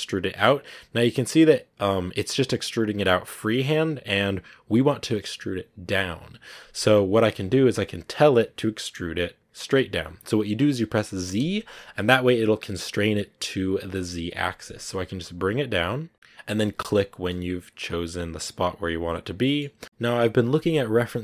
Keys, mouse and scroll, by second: 17.0 scroll down 3, 17.2-21.2 middle drag.